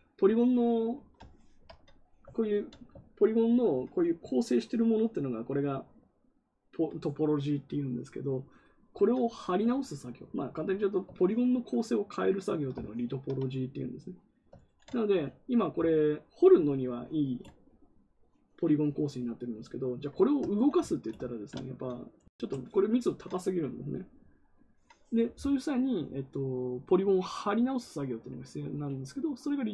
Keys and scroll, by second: 14.5 ctrl+z.